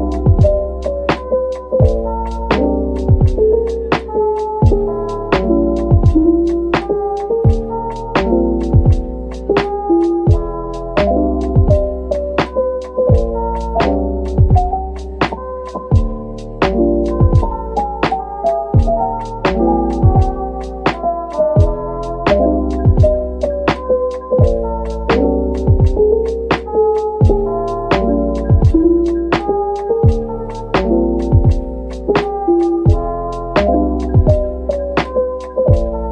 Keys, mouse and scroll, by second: 4.7 middle click, 8.5 ctrl+click, 9.1 d, 9.9 right click, 10.8 p, 11.7 middle click, 12.4 Tab, 14.9 typing, 18.1-18.7 typing, 21.0 double click, 21.4 Tab, 21.8 middle click, 22.3 Tab, 22.9 middle click, 27.2 shift+right click, 29.4 shift+right click, 29.8 a.